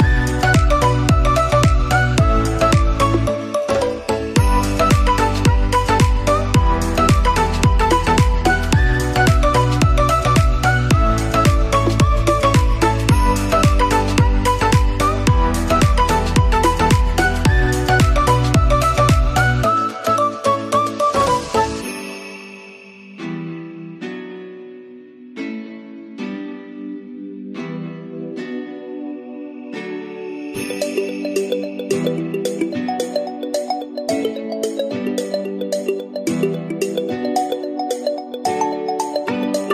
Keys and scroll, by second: 3.0 Delete, 12.1 ctrl+-, 32.0 ctrl+=.